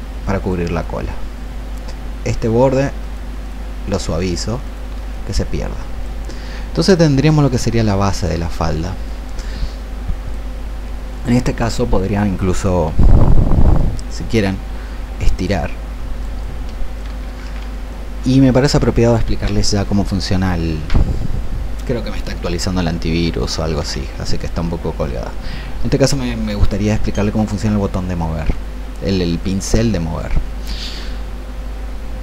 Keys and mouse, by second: 3.0 shift+click, 4.0 shift+click, 4.5 shift+click, 5.1-17.5 drag, 17.5 ctrl+z, 17.9 click, 29.5 click.